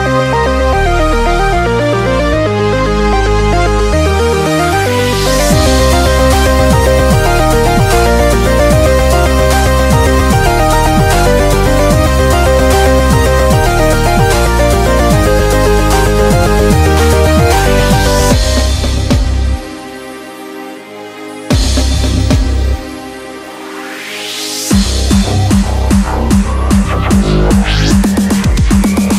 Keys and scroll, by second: 0.9 typing, 7.0 ].